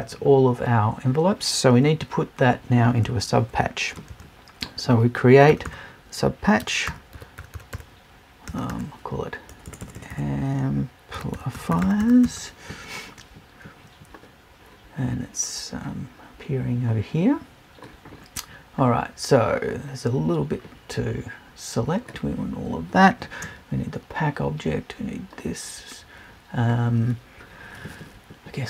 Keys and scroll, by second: 9.6 BackSpace.